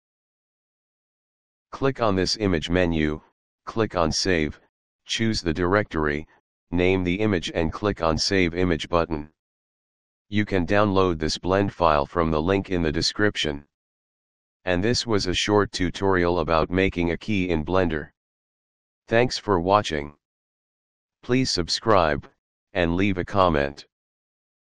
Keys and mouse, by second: 0.2 click, 2.2 click, 4.7 click, 5.6 k, 5.7 e, 5.9 y, 7.7 click.